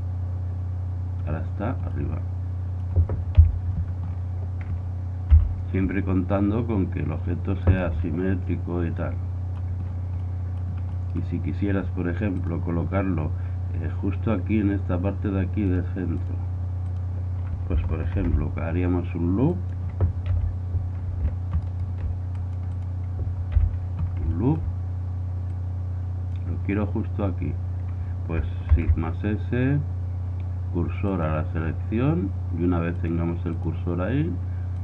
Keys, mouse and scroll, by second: 2.0-3.4 middle drag, 3.4 KP_7, 3.9-6.1 middle drag, 5.3 r, 9.0-11.8 middle drag, 12.5 typing, 12.7-15.4 drag, 15.8-18.1 drag, 18.3 ctrl+r, 22.4 click, 23.6 KP_1, 24.1 click, 24.3 drag, 26.0-27.4 drag, 28.7 shift+s, 33.0-34.8 drag.